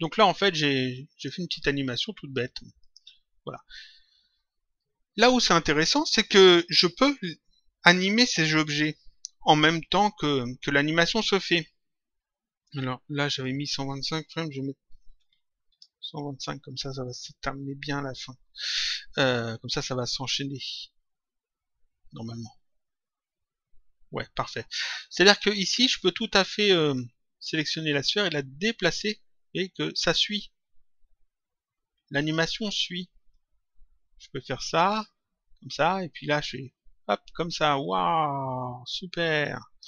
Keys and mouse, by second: 2.7 click, 13.4 click, 15.6 Return, 25.6 click, 28.3 click, 33.3 click.